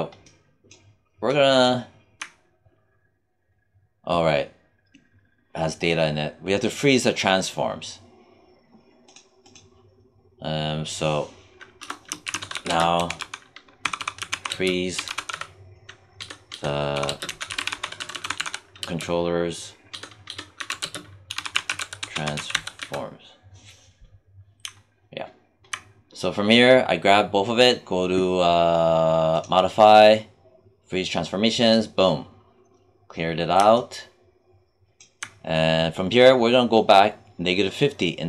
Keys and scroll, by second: 11.7 Return, 11.9-12.9 typing, 14.4 space, 14.9 t, 16.1 BackSpace, 16.8 e, 17.0 space, 17.2 c, 18.7 space, 19.8 BackSpace, 20.5 ', 20.7 space, 21.2 t.